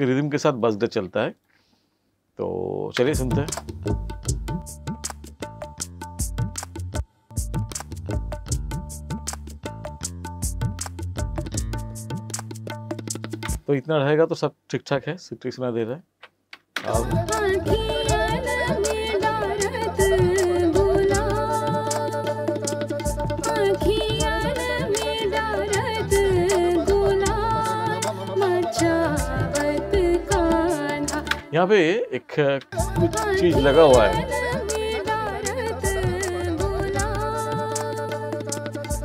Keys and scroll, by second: 2.9 space, 6.9 space, 13.4 space, 16.8 space, 31.3 space, 32.6 space.